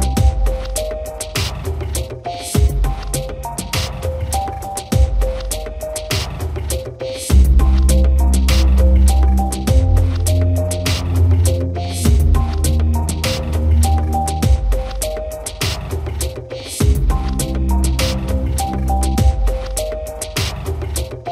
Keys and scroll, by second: 20.1 Return.